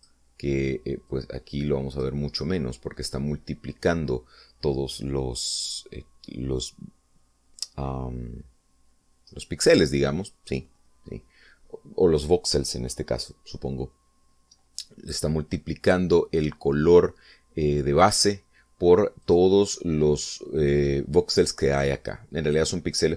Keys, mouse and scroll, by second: 0.7 click, 1.9 click, 10.2-10.5 scroll up 2, 18.8 click, 20.1 click.